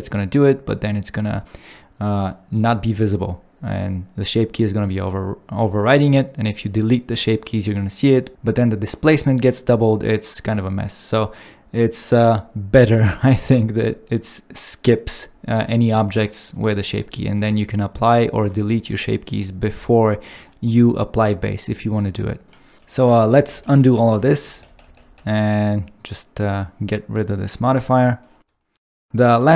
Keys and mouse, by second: 7.6 click, 16.4 click, 22.8 ctrl+s, 22.8 click, 23.2 ctrl+z, 23.4 ctrl+z, 24.0 ctrl+z, 24.9 ctrl+z, 26.8 ctrl+z, 26.8 ctrl+z, 27.9 click.